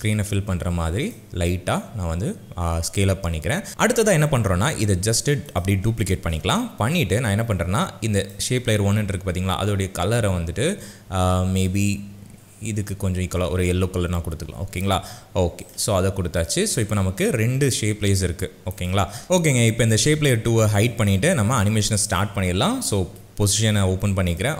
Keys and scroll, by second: 6.2 ctrl+d, 23.1 p.